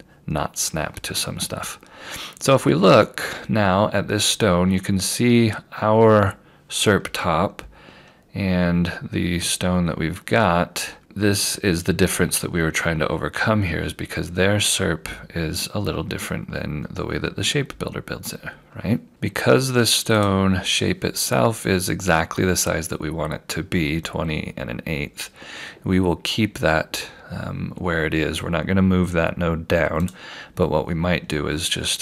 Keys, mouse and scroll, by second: 0.4-2.0 scroll down 1, 2.5 scroll up 1, 7.0 scroll down 1, 9.4 scroll down 1, 11.3 scroll up 1, 17.1 scroll up 1, 18.2-19.1 scroll down 1, 19.1 click, 30.1 click, 31.2 scroll up 1, 31.8-32.0 scroll down 1.